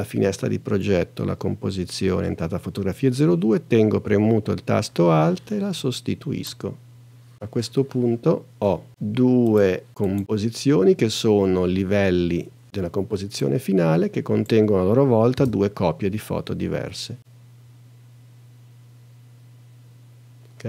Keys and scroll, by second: 15.3 space.